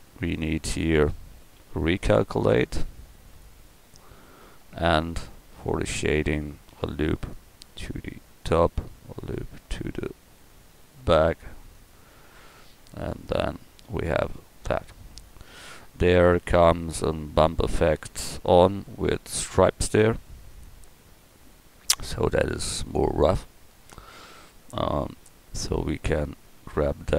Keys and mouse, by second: 1.3 a, 1.6 a, 4.3 Tab, 5.0 Tab, 6.7 ctrl+r, 9.3 ctrl+r, 13.2 Tab, 18.4 KP_1.